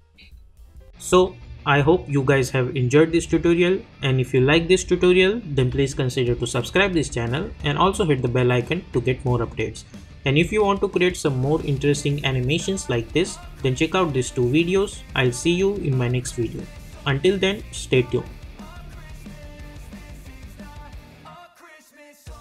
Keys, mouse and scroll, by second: 0.2 space.